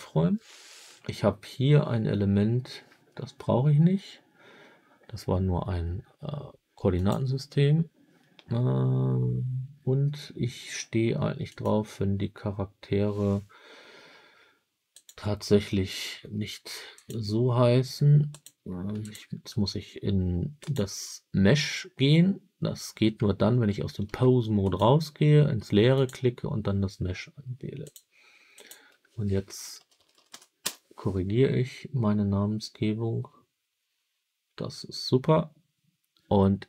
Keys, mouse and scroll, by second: 2.8 Delete, 6.8-8.1 drag, 11.4 click, 14.8 click, 16.8 click, 18.2 click, 18.9 click, 20.5 click, 23.9 ctrl+Tab, 24.5 click, 25.8 click, 27.7-31.4 drag, 29.8 BackSpace, 30.2 BackSpace.